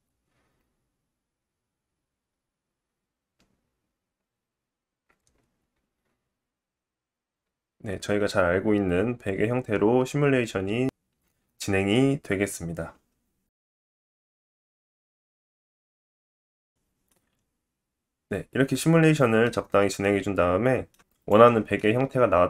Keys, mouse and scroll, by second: 16.7 click, 17.4-18.9 drag, 17.4-18.9 middle drag, 17.4-18.9 right drag, 19.5 scroll down 2, 19.9 middle click, 21.9 click.